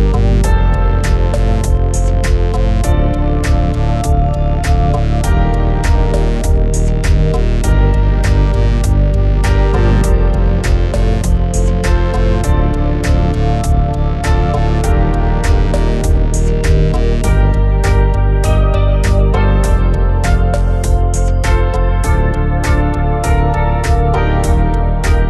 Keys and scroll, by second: 9.1 alt+c, 22.2-24.7 typing.